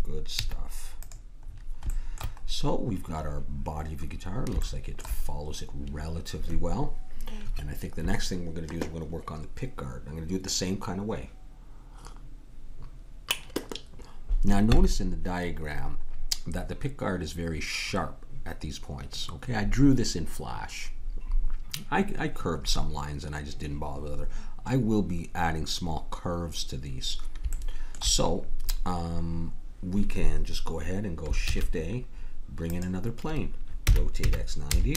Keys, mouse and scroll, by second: 0.5 z, 1.4 middle click, 4.2 middle click, 31.4 shift+a, 33.8 r.